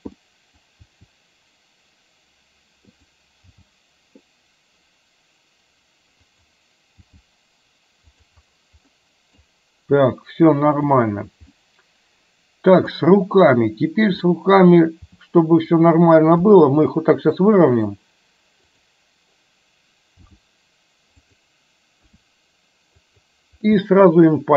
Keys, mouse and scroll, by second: 0.2-0.6 middle drag, 0.8 r, 3.6 g, 7.1 g, 9.0 middle click, 11.0 click, 11.6-13.0 middle drag, 14.3 middle click, 15.1 g, 16.6 r, 18.7 click, 20.2 g, 22.2 r, 24.2-24.5 middle drag.